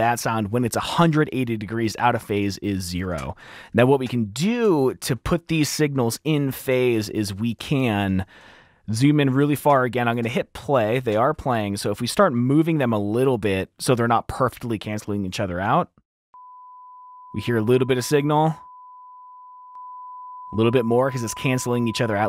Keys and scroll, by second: 2.3 space, 3.5 F7, 5.0 F7, 5.0 super+4, 7.1 t, 8.5 t, 10.9 super+4, 10.9 F7, 11.4 F7, 13.7 super+4, 13.7 F2.